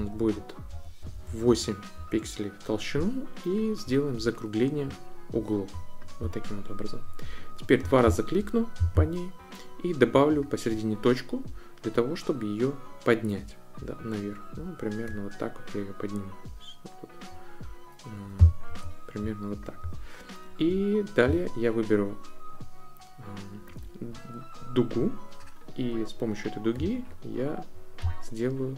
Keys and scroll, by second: 0.0 Up, 0.7 Up, 1.3 Up.